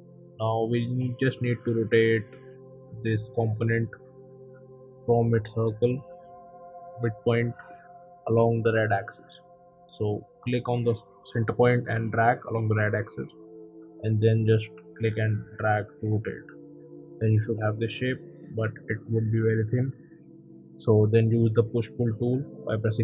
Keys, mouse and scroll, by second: 0.0 q, 7.3 Right, 7.9 click, 10.3 click, 11.8 click, 16.2 click, 17.9 p, 18.7 click.